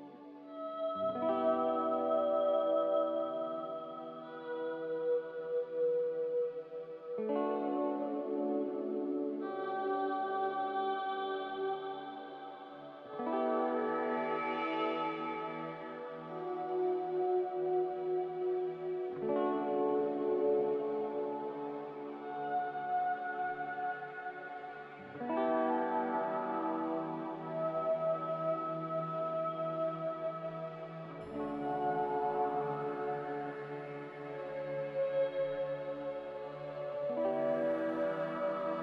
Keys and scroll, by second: 16.8 m, 19.7 a, 25.9 Delete, 28.5 z, 32.3-33.4 typing, 35.0 Delete, 38.0 ctrl+z.